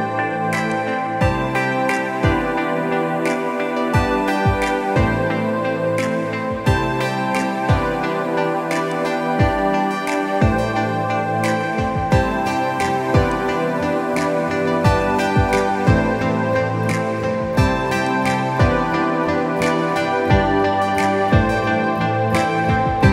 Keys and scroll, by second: 20.3 ctrl+z.